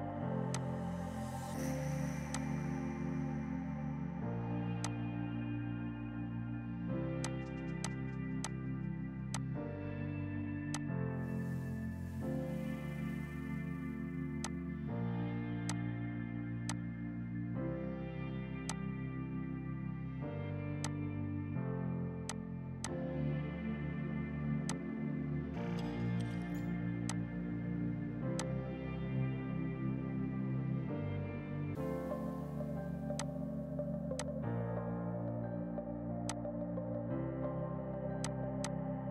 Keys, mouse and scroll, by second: 0.6 click, 5.8 Down, 7.3 shift+click, 7.8 click, 8.2 c, 8.4 shift+click, 9.0 Escape, 9.4 click, 12.6 F4, 14.5 click, 15.7 alt+click, 16.7 click, 18.6 F2, 18.8 click, 21.9 ctrl+g, 22.4 shift+click, 22.6 c, 22.9 shift+click, 23.9 ctrl+u, 24.8 click, 28.4 click, 32.6 Escape, 33.2 click, 34.1 F2, 34.2 click, 36.5 click, 37.5 l, 38.2 click, 38.7 click, 38.9 r.